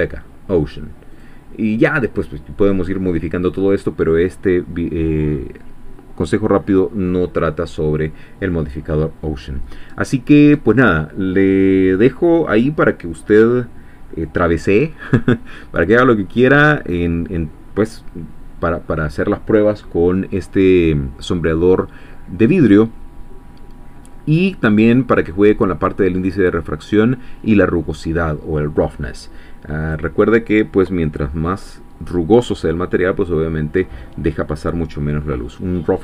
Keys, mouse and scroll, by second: 1.1 click, 29.8-36.0 drag.